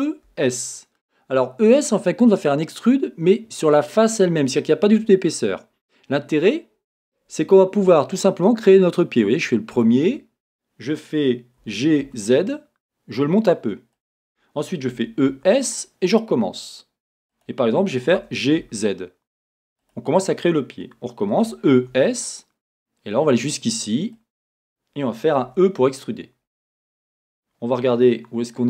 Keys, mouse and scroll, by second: 9.8 click, 11.6 g, 14.1 click, 14.9 e, 17.4 click, 18.2 g, 19.9 click, 21.3 e, 24.4 e, 27.0 click, 28.2 scroll.